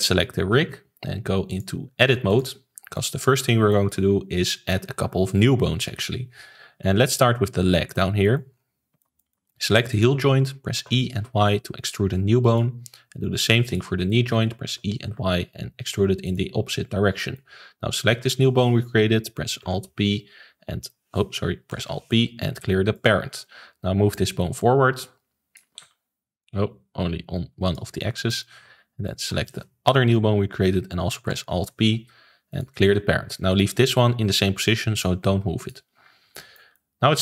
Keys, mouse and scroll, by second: 1.4-3.0 drag, 3.3 shift+middle click, 4.0 ctrl+s, 7.5 middle click, 8.5-8.9 scroll up 3, 8.9 shift+middle click, 9.9 click, 10.2 middle click, 10.7 e, 13.6 click, 14.0 shift+middle click, 14.6 e, 17.1 shift+middle click, 17.9 click, 19.6 alt+p, 21.7 alt+p, 24.1 click, 25.8 ctrl+z, 26.4 click, 28.1 shift+middle click, 29.0 click, 31.2 alt+p, 35.5 click, 36.0-36.3 scroll down 1, 36.3-37.2 shift+middle drag.